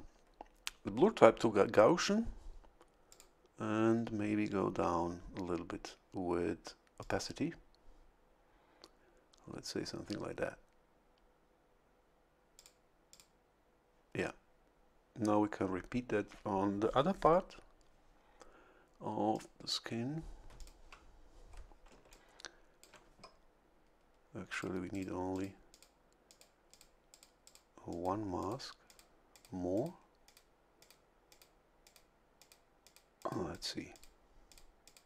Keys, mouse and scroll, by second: 3.1 click, 7.0 click, 12.5 click, 13.1 click, 19.3 click, 20.5 ctrl+click, 21.9 a, 22.1 click, 24.5 click, 24.9 click, 25.3 click, 25.7 click, 26.3 click, 26.7 click, 27.1 click, 27.9 click, 28.4 click, 28.9 click, 29.3 click, 29.7 click, 30.2 click, 30.8 click, 31.3 click, 31.8 click, 32.4 click, 32.8 click, 33.9 click, 34.5 click, 34.8 click.